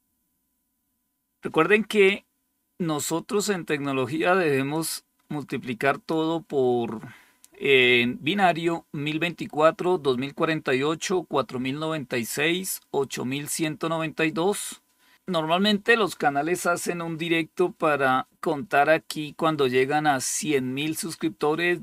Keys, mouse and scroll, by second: 4.5-6.0 drag.